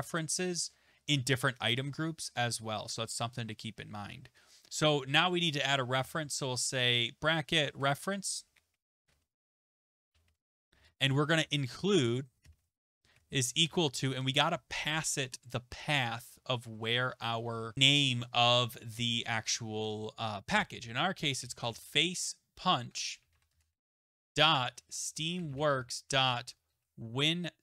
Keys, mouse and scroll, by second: 6.0 typing, 7.4-14.0 typing, 21.1-27.6 typing.